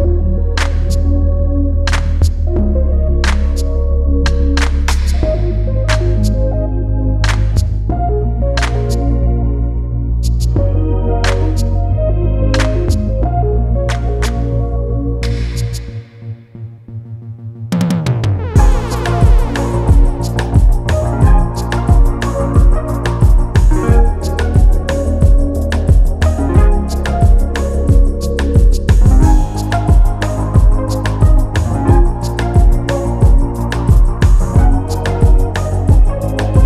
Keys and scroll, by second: 0.0 ctrl+t, 5.1 alt+Return, 8.0 ctrl+t, 8.7 ctrl+alt+t, 21.3 Return, 21.8 alt+Return, 29.2 ctrl+shift+].